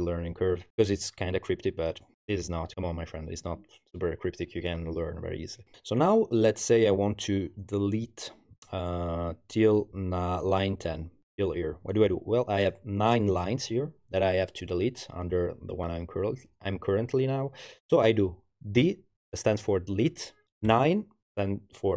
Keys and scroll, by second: 18.8 d, 20.7 9.